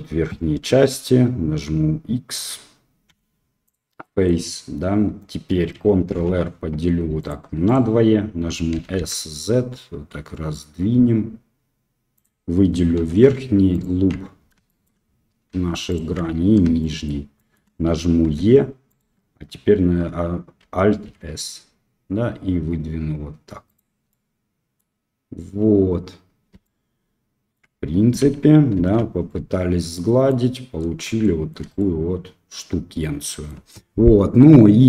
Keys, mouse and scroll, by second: 3.0 x, 4.0 middle click, 6.1 ctrl+r, 8.7 s, 12.9 3, 13.7 alt+click, 14.6 shift+middle click, 15.8 alt+shift+click, 16.8 shift+click, 16.8 shift+middle click, 17.3 shift+click, 18.2 e, 21.0 alt+s, 24.0 middle click, 26.6 middle click, 27.7 Tab, 28.7 ctrl+3, 29.2-30.3 drag, 31.2-31.5 shift+middle drag, 31.7-33.4 middle drag.